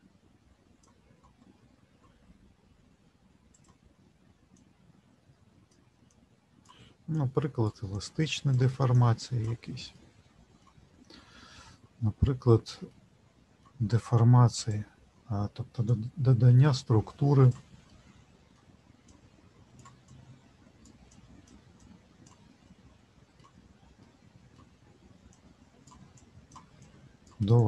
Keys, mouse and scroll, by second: 3.5 click, 4.7 click, 9.9 middle click, 12.0 middle click, 12.9 shift+middle click, 14.6 click, 15.9 click, 17.9 middle click, 19.1 click, 20.1 click, 22.7 middle click, 23.6-23.9 scroll down 1, 23.9 middle click, 25.3 click, 26.2 click.